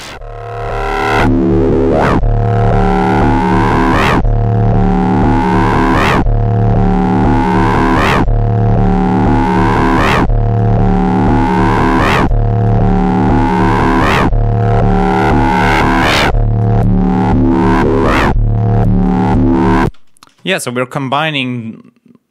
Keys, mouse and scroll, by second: 7.2-8.3 drag, 8.8 click, 14.4 click, 15.5 click, 16.2 click, 18.7 click, 19.7 space.